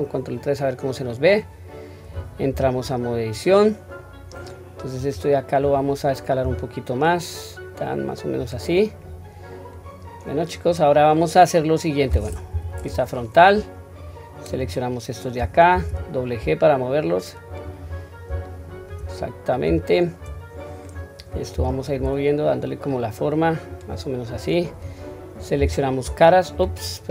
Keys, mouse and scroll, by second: 2.5 Tab, 3.0 scroll up 1, 3.8-4.9 scroll down 1, 4.9-5.5 drag, 6.4 s, 11.1 middle click, 12.4 KP_1, 12.8-13.9 scroll up 1, 13.9-14.5 drag, 13.9 scroll up 1, 15.6 g, 17.8-18.2 scroll down 1, 18.4 shift+middle click, 19.2-19.6 scroll up 1, 19.8-20.2 shift+middle drag, 20.5-20.9 drag.